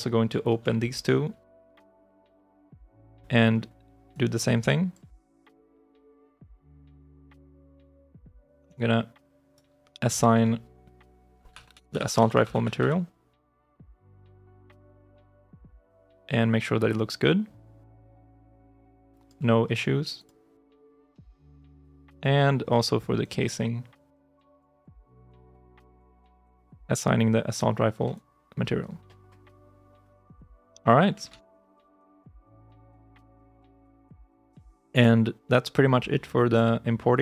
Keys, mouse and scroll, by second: 0.3 ctrl+click, 1.4 Return, 7.2 right click, 7.3 f, 8.1 alt+click, 8.5 alt+right click, 11.1-13.1 typing, 15.2 alt+click, 20.5 right click, 20.7 f, 21.3 alt+click, 21.7 alt+right click, 24.3-26.4 typing, 28.0 alt+click, 31.1 ctrl+shift+s, 34.3 ctrl+shift+s.